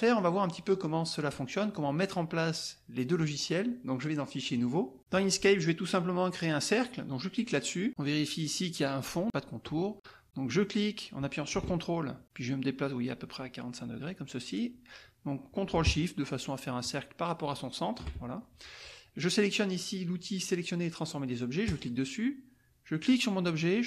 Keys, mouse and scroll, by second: 1.2 click, 5.8 click, 10.5-11.8 drag, 12.7-18.1 ctrl+drag, 21.6 click, 23.0-23.8 drag.